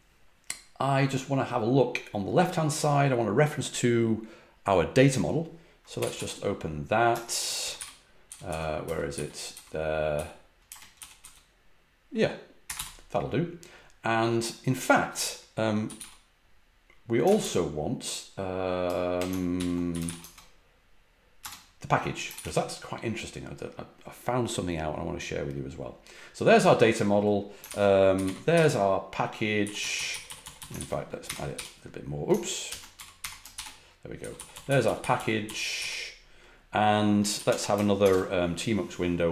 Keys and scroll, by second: 5.7-11.2 typing, 12.3-13.2 typing, 15.5-16.4 typing, 17.2 ctrl+w, 19.5 ctrl+p, 19.6-20.5 typing, 21.4 Return, 22.3 shift+g, 27.6 ctrl+w, 27.9-31.5 typing, 30.7 ctrl+w, 32.6 ctrl+w, 32.7-35.6 typing, 37.3 ctrl+a, 38.0 shift+|.